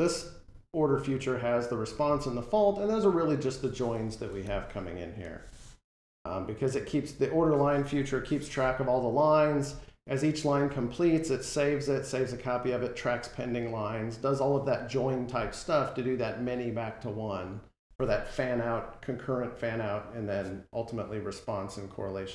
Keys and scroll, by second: 4.3 alt+End, 8.0 F12.